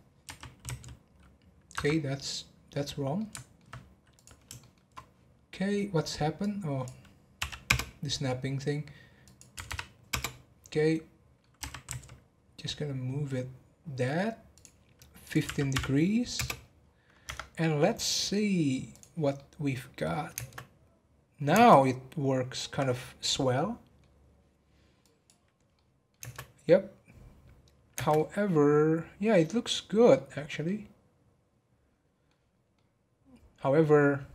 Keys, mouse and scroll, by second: 0.2 r, 1.9 scroll down 4, 2.2-4.1 middle drag, 4.1 click, 4.6 shift+middle click, 4.9 scroll up 1, 6.4-9.6 drag, 9.6 3, 10.7 middle click, 11.6 r, 15.2-16.8 drag, 16.8-17.2 scroll down 1, 17.2 Tab, 17.5-18.9 middle drag, 18.9 click, 19.3-20.3 middle drag, 20.3 space, 21.5 space, 21.8-24.8 middle drag, 25.0-25.7 drag, 25.7-26.2 middle drag, 26.2 space, 28.0 space, 28.1-30.3 middle drag, 30.3 scroll up 1, 30.6-32.5 middle drag, 32.5 scroll down 1, 32.7-33.9 middle drag, 33.9-34.3 scroll down 5.